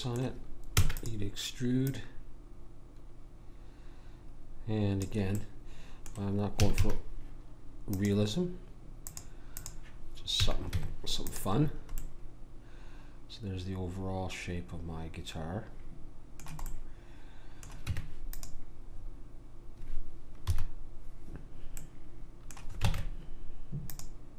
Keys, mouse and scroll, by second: 0.7 e, 1.9 click, 5.3-6.5 middle drag, 6.5 a, 6.8 a, 9.7 click, 10.4 a, 10.7 Tab, 12.0-14.0 middle drag, 16.6-17.9 middle drag, 17.9 Tab, 20.4 KP_1, 22.9 ctrl+Tab.